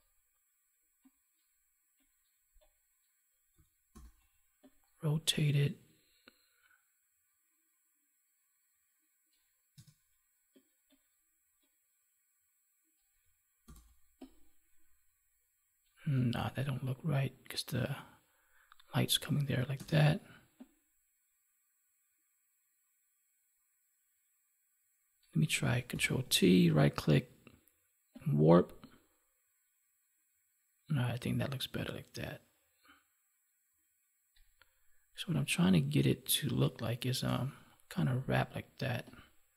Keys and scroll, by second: 3.9 ctrl+t, 13.6 ctrl+t, 16.3 ctrl+z, 25.8 ctrl+t.